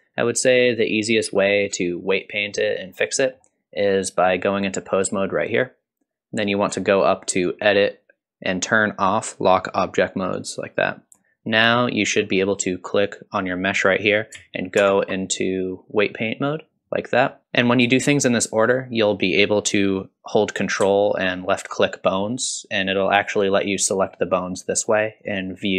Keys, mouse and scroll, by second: 1.2 middle click, 1.9 click, 3.1 middle click, 7.3-10.5 drag, 11.1-12.9 scroll up 2, 12.9 click, 14.8 ctrl+Tab, 17.3-17.9 scroll down 2, 17.4 middle click, 17.4-17.9 scroll up 1, 21.9 ctrl+click, 22.9 ctrl+click, 24.2 ctrl+click, 25.4 ctrl+click.